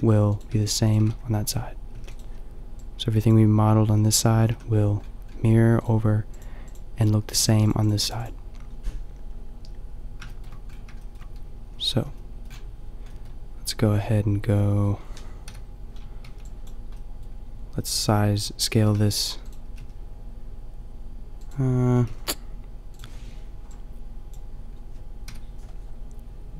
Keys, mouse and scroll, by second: 0.0-2.0 typing, 2.8-5.2 drag, 4.5 a, 5.5 click, 5.9 click, 6.3-7.7 middle drag, 7.7-10.3 drag, 10.3-11.6 middle drag, 11.6 a, 11.9 a, 12.5 middle click, 14.8 middle click, 15.0 middle click, 15.5 KP_5, 16.3 b, 16.5 click, 18.8 s, 19.6 s, 22.0 s, 25.3 KP_5.